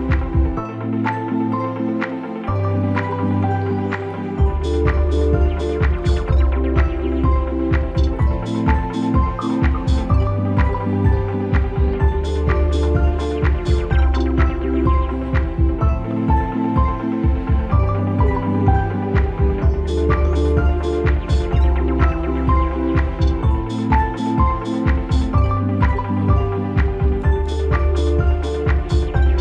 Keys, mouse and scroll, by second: 0.5-3.0 drag, 4.7 right click, 5.4 click, 12.1-16.4 drag, 19.8-21.6 alt+drag.